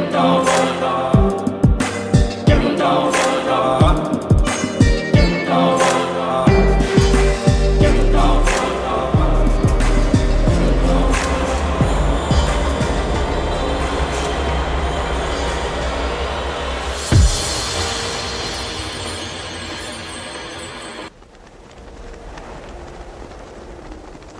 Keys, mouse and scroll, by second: 1.0 ctrl+z, 3.5-6.3 drag, 10.3-11.0 shift+drag.